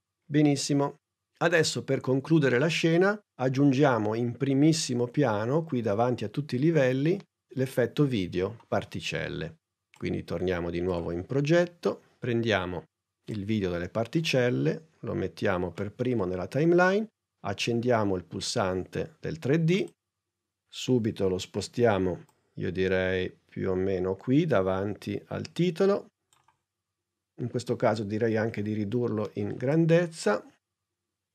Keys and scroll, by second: 20.9 p, 28.6 s.